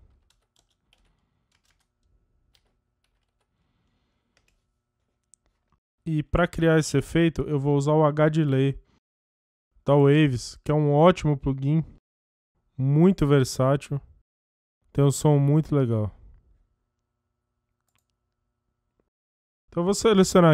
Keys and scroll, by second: 0.0-1.6 typing, 2.6-3.9 typing, 4.5 Return.